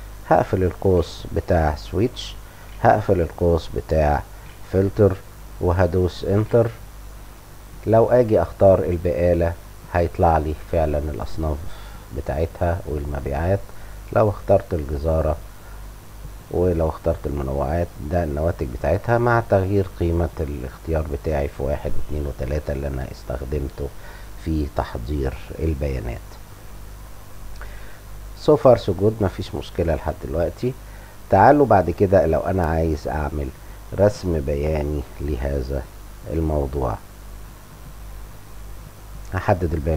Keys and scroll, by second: 0.0-1.4 typing, 2.1 Return, 2.7-4.3 typing, 6.3 Return, 7.4 End.